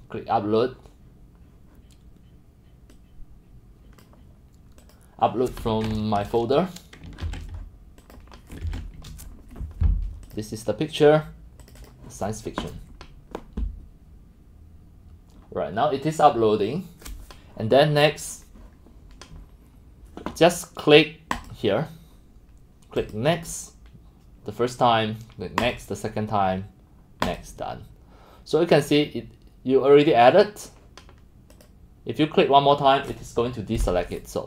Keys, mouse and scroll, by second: 2.9-4.1 drag, 4.5 click, 7.2 ctrl+c, 8.2 click, 8.6 ctrl+v, 9.0 Return, 10.4-11.3 drag, 11.6 click, 11.8 click, 18.8 drag, 21.4 click, 23.0 click, 26.2 drag, 27.3 click, 31.5 click.